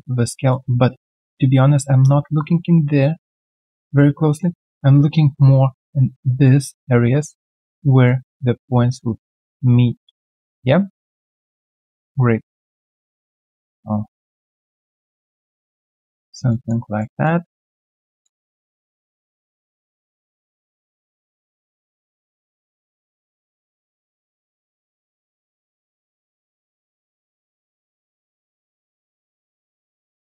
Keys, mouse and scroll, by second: 4.4 alt+middle click, 5.1 alt+right click, 7.0 middle click, 10.2 alt+middle click, 10.5 alt+scroll down 1, 11.6 alt+right click, 12.4 middle click, 16.2 middle click, 16.8 alt+right click, 17.2 alt+middle click, 18.2 alt+middle click, 21.0 alt+middle click, 24.3 alt+middle click, 26.9 alt+middle click, 29.1 middle click.